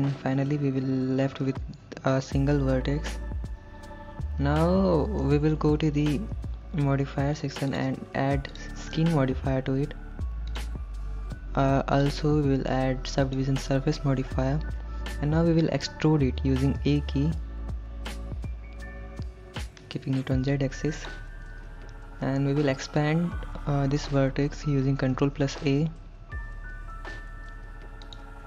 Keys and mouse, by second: 0.6 KP_1, 5.2 shift+middle click, 8.5-10.7 drag, 12.1-13.4 drag, 16.8 e, 20.4 z, 21.0 click, 25.2 ctrl+a, 28.1 click.